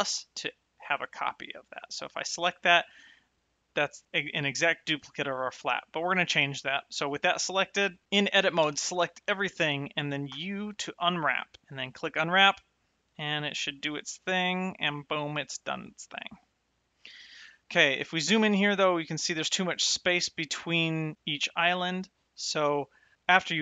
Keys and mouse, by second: 0.9 click, 2.0 click, 6.8 click, 9.1 a, 10.5 u, 10.8 click.